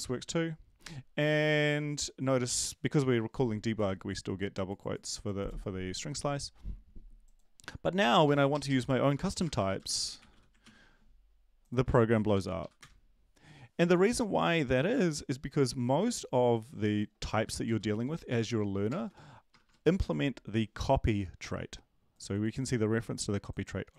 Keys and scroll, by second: 8.0 Left, 8.5 Left, 9.4-10.8 typing, 12.3 ctrl+l, 12.6 Up, 12.8 Return, 17.7 Down, 18.0 End, 18.3 ctrl+Left, 18.9-20.0 typing.